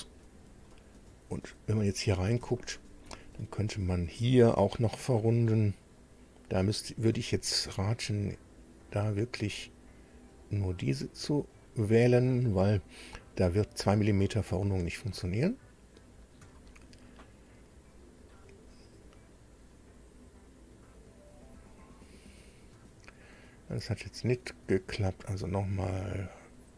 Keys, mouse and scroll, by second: 0.7-1.9 drag, 1.9 middle click, 2.5 shift+middle click, 3.5 shift+scroll up 3, 6.5 click, 7.6 ctrl+click, 8.8 ctrl+click, 10.3 ctrl+click, 11.5 ctrl+click, 12.7 ctrl+click, 14.5 ctrl+click, 16.0 ctrl+click, 16.5-18.4 ctrl+middle drag, 21.3 click, 24.5 click, 25.8 ctrl+click.